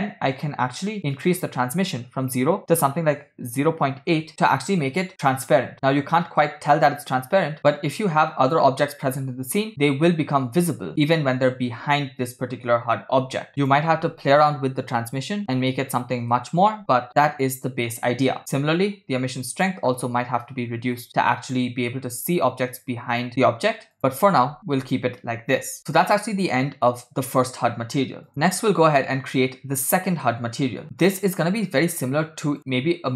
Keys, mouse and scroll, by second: 1.2-4.3 drag, 6.7 shift+a, 7.6-8.0 scroll down 1, 13.6-16.4 drag, 19.4-21.1 drag, 23.9 click, 25.8 space, 28.3 space, 28.5 space, 28.9 scroll down 2, 29.4-29.9 scroll up 4, 30.0 scroll down 1, 30.9 shift+middle click, 30.9 space, 31.1 click, 32.7 click.